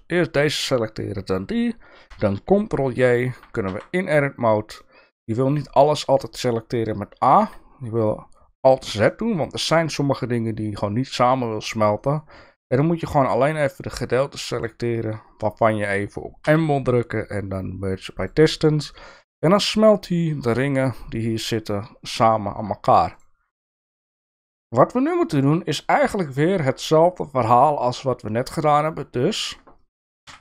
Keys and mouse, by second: 2.8 ctrl+j, 3.7 Tab, 4.9 middle click, 5.9 middle click, 6.6 middle click, 8.8 alt+z, 9.1 middle click, 12.0-14.6 drag, 15.4 middle click, 16.4 m, 18.9 middle click, 22.7 alt+z, 23.6 middle click, 25.1 shift+middle click, 30.3 KP_3.